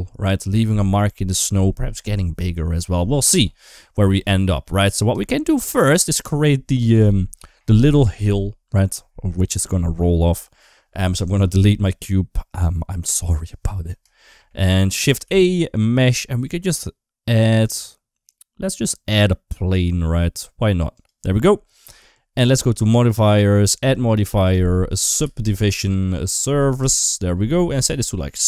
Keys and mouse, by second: 4.5 middle click, 5.1 shift+middle click, 5.5 middle click, 12.9 Delete, 14.1 shift+middle click, 14.5 middle click, 15.1 shift+a, 22.6 click, 23.6-26.7 drag, 28.0 click.